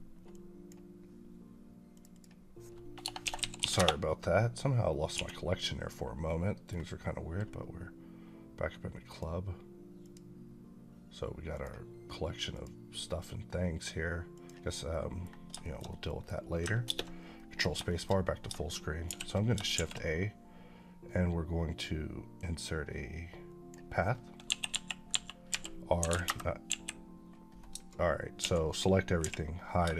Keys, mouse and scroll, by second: 0.2 click, 3.1 shift+c, 5.0 1, 5.5 middle click, 5.8 scroll up 2, 6.1 middle click, 14.7 middle click, 15.5 shift+middle click, 16.7 ctrl+space, 17.2 middle click, 17.7 shift+middle click, 18.2 middle click, 18.9 shift+c, 19.6 shift+a, 22.2-23.8 drag, 24.3-26.5 typing, 26.1 KP_Enter, 28.2 a, 29.1 h, 29.8 shift+a.